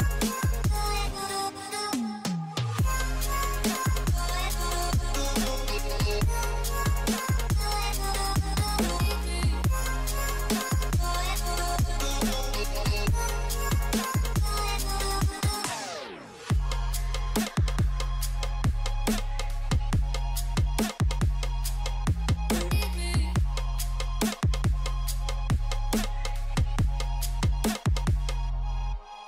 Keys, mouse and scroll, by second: 1.3 shift+click, 2.3 scroll down 1, 2.3 shift+click, 3.6 shift+click, 4.2 scroll down 1, 5.2 space, 6.9 alt+scroll down 1, 8.2 scroll down 1, 8.6 space, 21.1 shift+click, 22.2 scroll down 1, 23.9 shift+click.